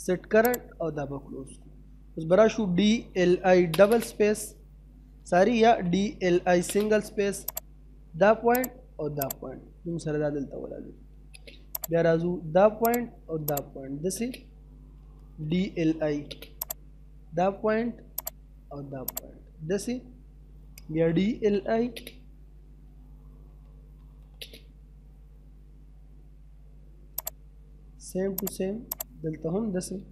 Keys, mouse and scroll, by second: 1.2 middle click, 1.6-2.3 scroll down 1, 2.3-3.5 typing, 5.4-6.3 typing, 6.6 scroll up 1, 7.5 click, 9.6 middle click, 10.0 scroll down 1, 10.2 middle click, 10.7 scroll up 1, 10.9 space, 11.8 click, 13.8 space, 15.0 d, 15.9 space, 16.6 click, 19.6 middle click, 20.7-21.9 typing, 23.1-24.0 typing, 24.8-25.3 scroll up 1, 27.1 click, 29.3-29.9 scroll down 2, 29.5 middle click, 29.9 middle click.